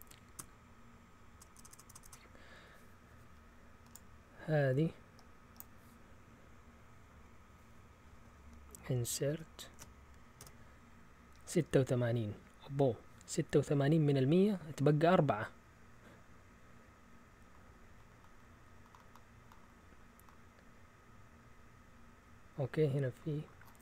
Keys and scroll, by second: 0.4 BackSpace, 1.0 BackSpace, 1.0 BackSpace, 1.1 BackSpace, 9.3 ctrl+shift+Insert, 10.4 Return.